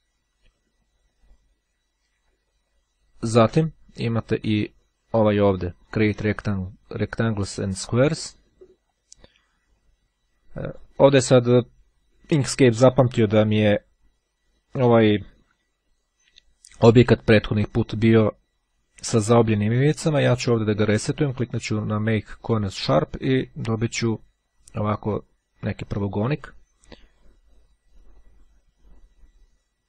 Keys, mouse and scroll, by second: 2.6-3.3 ctrl+scroll down 2, 7.5-8.8 drag, 9.0-11.3 drag, 20.9-23.5 drag.